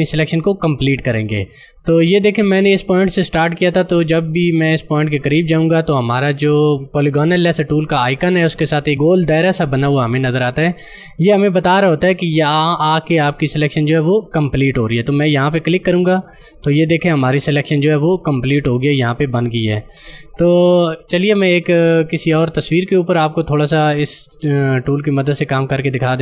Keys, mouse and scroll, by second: 15.7 click, 25.2 click.